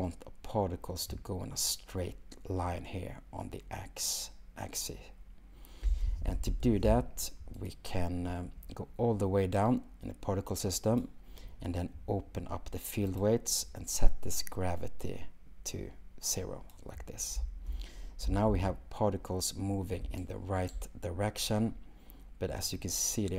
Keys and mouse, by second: 5.9 space, 7.6 click, 13.2 click, 15.1-16.8 drag, 17.4 space.